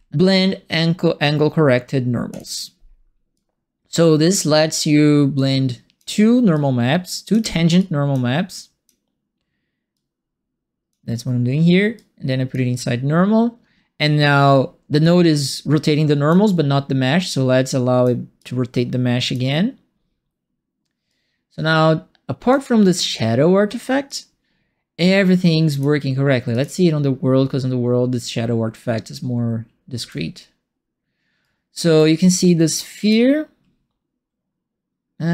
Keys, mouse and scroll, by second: 2.3 click, 3.3 click, 5.3 click, 6.5 click, 7.7 click, 8.5 click, 9.9 click, 11.9 click, 15.0-16.2 drag, 17.2 click, 18.3 click, 21.0-22.5 drag, 24.0-25.7 drag, 26.5 click, 31.4 right click, 32.1 click, 33.0 click.